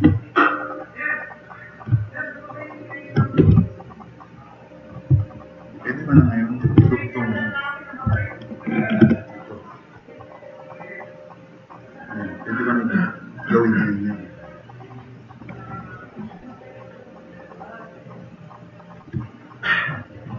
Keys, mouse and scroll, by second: 1.1-3.0 drag, 3.5 t, 3.7-4.8 drag, 8.1 shift+F6, 9.2 click, 9.9-11.3 drag, 16.1 drag, 16.6-16.9 drag, 17.2-17.5 drag, 17.6 drag, 18.2 drag.